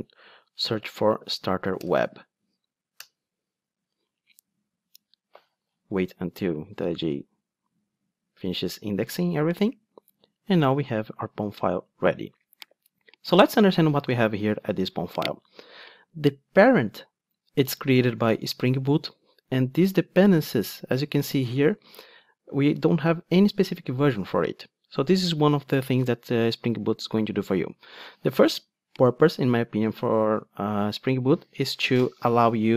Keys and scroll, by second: 1.8 Return.